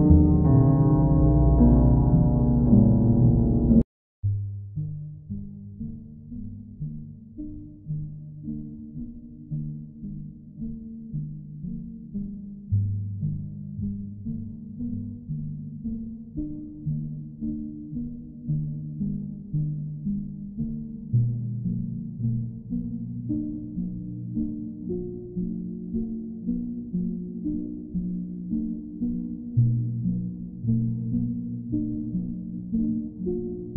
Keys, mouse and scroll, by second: 2.2-3.2 drag, 4.6-5.8 drag, 10.1 click, 10.5 shift+click, 11.2 click, 11.8 click, 12.0 shift+click, 12.3 shift+click, 13.0 shift+click, 13.7 alt+click, 15.2 click, 16.6 click, 19.2 click, 20.7 click, 22.7 click, 24.8 click, 25.9 shift+click, 27.9 click, 29.1 click, 29.7 click, 30.1 shift+click, 30.5 shift+click, 30.9 alt+click, 32.9 click, 33.1 ctrl+z.